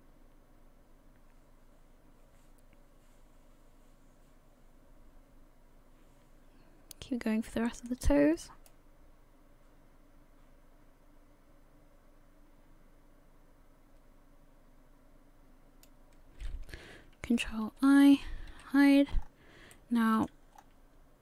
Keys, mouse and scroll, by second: 2.9 middle click, 8.7 click, 17.6 ctrl+i, 18.5 h, 19.1-19.5 scroll up 5, 19.7 shift+middle click, 20.5-21.2 scroll up 3.